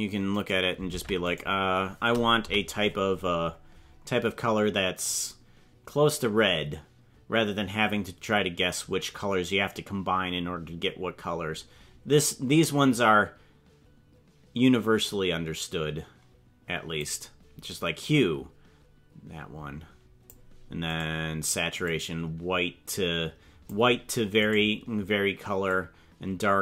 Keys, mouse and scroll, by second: 0.4 right click, 0.9 ctrl+Tab, 1.4 right click, 2.4 KP_Decimal, 3.2-4.1 scroll down 13, 5.0-17.1 drag, 18.0-20.3 drag, 21.1 right click, 21.8-23.8 drag, 24.6 right click, 25.7-26.6 drag.